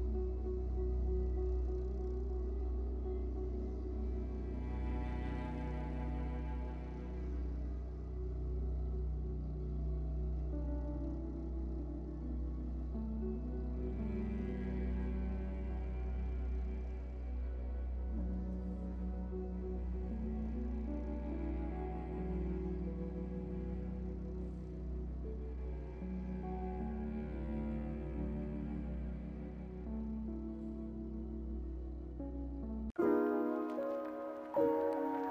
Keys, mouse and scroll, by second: 6.8 shift+middle drag, 7.0 scroll up 8, 12.1-14.2 drag, 15.9 click, 16.4 KP_0, 17.1 shift+middle drag, 17.3 scroll up 1, 20.9 scroll down 10, 22.0 alt+h, 23.4 click, 23.7 scroll down 1, 24.2-25.7 drag, 24.2 scroll down 1, 25.7 middle drag, 25.9-26.4 scroll up 4, 26.3-26.7 middle drag, 26.7 scroll down 6, 27.1-27.5 middle drag, 27.5-29.1 drag, 29.1 alt+h, 29.5 click, 29.9-30.3 middle drag, 30.3 h, 30.7-31.3 middle drag, 31.3-31.8 scroll down 3, 31.7 click, 32.5 h, 33.3 click, 33.6 scroll up 4, 34.4 Delete, 35.1 alt+h.